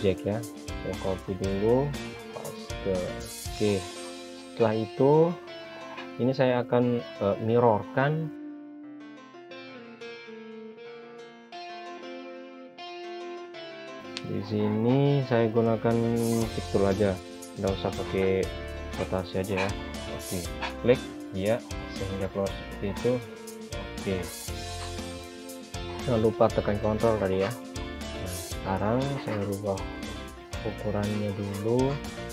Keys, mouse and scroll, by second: 0.6 click, 8.0-9.5 scroll up 1, 9.5 click, 11.4 0, 11.6 Return, 13.5 click, 18.2 typing, 19.1 Return, 20.3 ctrl+z, 21.4 click, 26.0 click, 31.5 click.